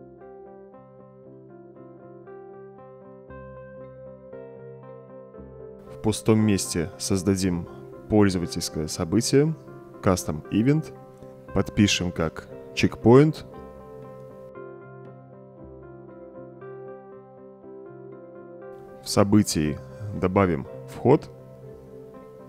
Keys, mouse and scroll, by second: 1.4-1.8 right drag, 2.9-5.7 middle drag, 9.4 c, 9.9 s, 10.1 Return, 13.1-16.7 typing, 18.2-20.2 drag, 22.0 click.